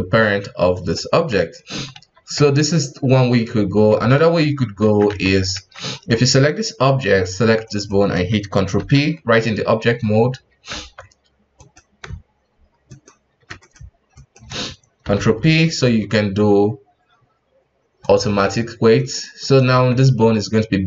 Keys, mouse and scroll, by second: 1.2-1.7 scroll down 2, 1.7 ctrl+z, 1.9 ctrl+z, 4.2 ctrl+z, 4.8 ctrl+z, 5.0 ctrl+z, 5.5 ctrl+z, 5.9 right click, 6.8-7.6 scroll up 1, 7.6 shift+right click, 8.7 ctrl+p, 10.7 ctrl+Tab, 11.5 right click, 12.8 shift+right click, 13.6 right click, 14.1 shift+right click, 15.0 ctrl+p, 18.9 right click, 19.4 right click, 19.7 ctrl+Tab, 20.3 g.